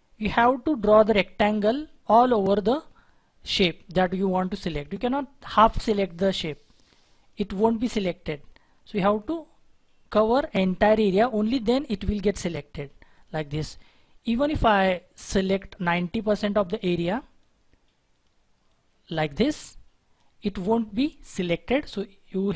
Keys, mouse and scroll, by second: 12.7-13.2 scroll down 1, 17.3 double click.